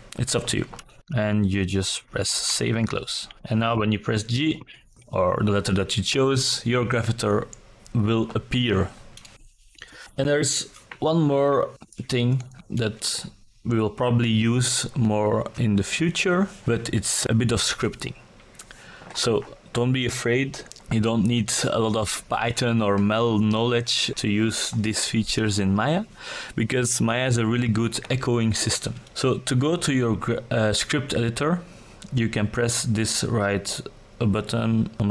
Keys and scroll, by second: 0.4 g.